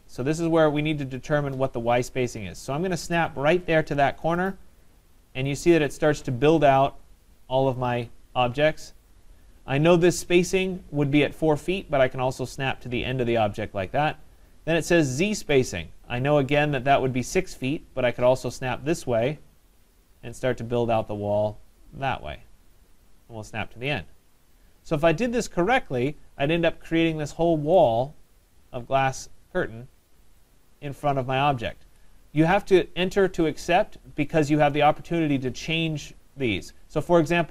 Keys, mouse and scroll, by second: 2.3 middle click, 4.4 click, 6.2-7.0 scroll, 8.3 middle click, 8.9 middle click, 9.0 middle click, 9.1 middle click, 9.2 middle click, 12.7 click, 15.5 scroll, 16.4 scroll, 18.3 middle click, 18.5 click, 18.9 middle click, 19.0 middle click, 19.0 middle click, 24.0 click, 24.6-27.2 scroll, 27.2 scroll, 28.8 middle click, 30.4 right click.